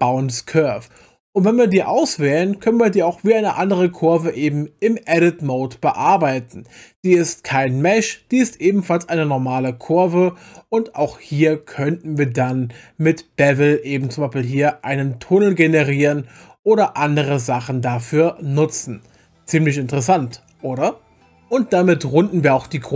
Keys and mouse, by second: 0.9 click, 2.6 Tab, 9.6 click, 14.0-16.5 drag, 19.3 Tab.